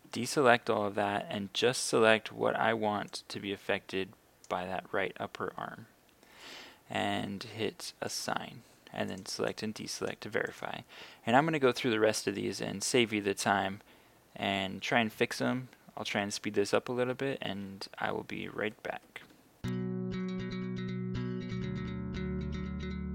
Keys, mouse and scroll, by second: 0.1 a, 1.2 b, 3.2-5.4 drag, 11.7-14.4 scroll down 1, 14.4-19.2 scroll up 1, 19.7 click, 22.6 a.